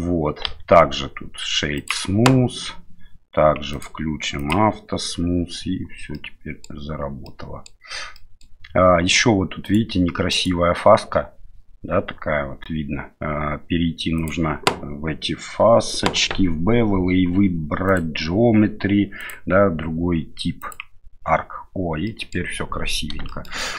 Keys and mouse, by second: 0.4 q, 3.7 click, 4.4 click, 6.1-6.6 middle drag, 7.2-7.7 middle drag, 8.1 middle drag, 9.6-10.6 right drag, 17.9 click, 19.2-20.7 drag, 22.0 middle drag, 23.3 shift+middle drag, 23.6 middle click.